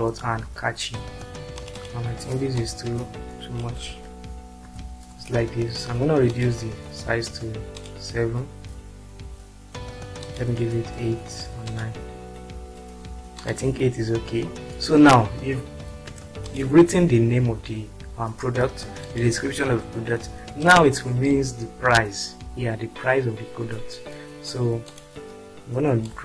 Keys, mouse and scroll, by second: 1.6 ctrl+click, 3.5 click, 3.9 BackSpace, 5.1 ctrl+space, 19.0 click, 20.6 click, 26.1-26.2 ctrl+drag.